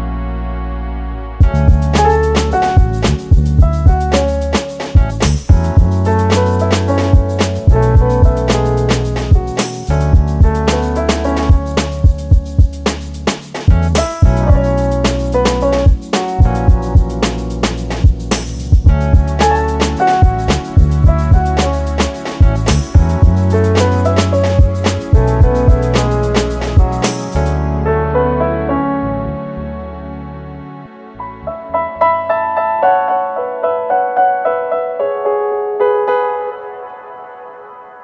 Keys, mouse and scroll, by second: 0.7 s, 1.7-2.8 middle drag, 1.7 click, 2.8 s, 4.1 middle click, 4.6-5.3 drag, 4.9 KP_1, 5.3-5.7 scroll down 1, 5.8 g, 7.3 click, 7.4-12.1 middle drag, 8.6 scroll up 1, 9.1 scroll up 1, 10.3 s, 12.7 Escape, 12.9 middle click, 13.7-19.4 middle drag, 14.9 scroll down 1, 17.7 scroll up 1, 19.0 scroll up 1, 19.4 click, 19.8-21.6 middle drag, 20.3-21.1 scroll up 2, 21.1 Tab, 21.6 click, 22.0-24.6 middle drag, 23.0 shift+z, 24.3-24.6 scroll up 2, 24.6 click, 25.1 3, 25.4 click, 26.3-28.8 middle drag, 27.2 g, 28.8 click, 29.1 shift+z, 29.3 scroll down 1, 29.5-35.1 middle drag, 32.6 scroll down 1, 34.6 Tab, 35.1 click, 35.2 scroll down 1, 35.5 scroll up 1, 35.6-38.0 middle drag, 36.9 scroll down 2.